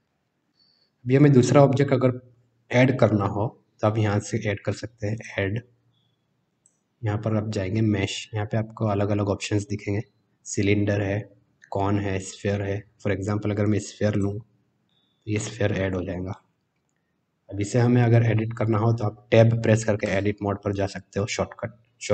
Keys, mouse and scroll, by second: 0.0 middle click, 5.1-14.2 drag, 14.8-15.3 middle drag, 16.3-16.8 middle drag, 20.0 Tab.